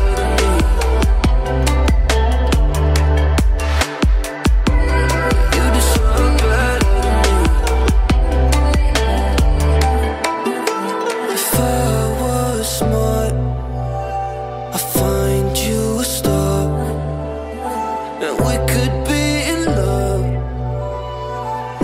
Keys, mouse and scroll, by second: 8.4-10.7 typing, 8.5-8.9 click, 11.0 click, 18.4-18.9 typing, 19.3-20.7 drag.